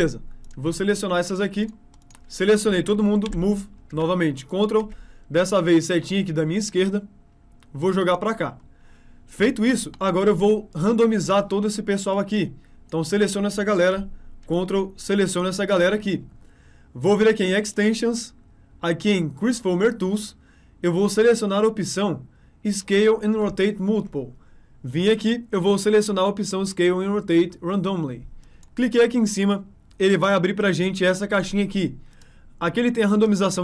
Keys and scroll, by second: 3.3 m, 5.4 Left.